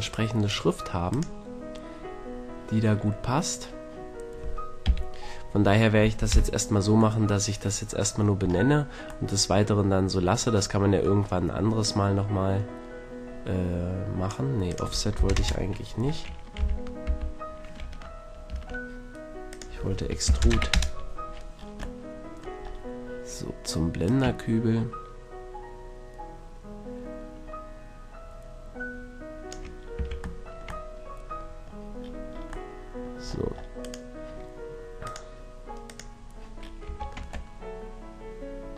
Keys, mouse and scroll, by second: 0.1-1.9 drag, 4.9 KP_3, 6.3 KP_Decimal, 9.8 KP_Decimal, 11.1-11.9 middle drag, 11.9 click, 13.6-14.7 middle drag, 14.7-16.6 drag, 16.6 z, 17.1 z, 17.9 Tab, 18.5 Tab, 24.1-25.9 drag, 29.8-31.1 middle drag, 30.1 a, 31.2 middle drag, 31.4-32.5 middle drag, 33.3 middle click, 33.5 middle click, 33.9-35.8 middle drag, 35.8 click, 36.5-36.9 middle drag, 36.9 a, 37.2 Tab, 37.7 middle click, 37.9 middle click, 38.7 middle click.